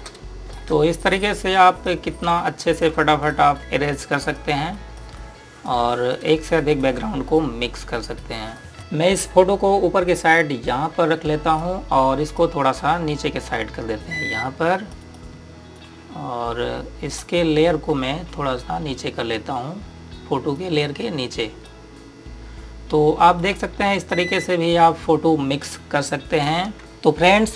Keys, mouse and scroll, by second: 0.8 space, 1.0 click, 1.3 space, 1.7 click, 3.0 space, 3.2 click, 3.5 space, 3.6 click, 7.0 space, 7.2 click, 7.5 space, 8.0 click, 21.3 click.